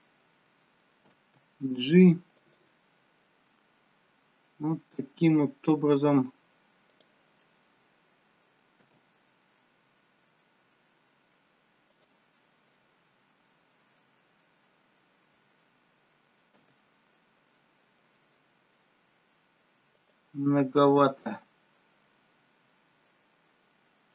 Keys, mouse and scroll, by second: 0.5 middle click, 0.5-1.2 scroll up 1, 1.2 g, 2.8 middle click, 6.9 click, 7.4 middle click, 9.0 g, 12.4 middle click, 16.7 g, 20.6 middle click, 23.1 middle click.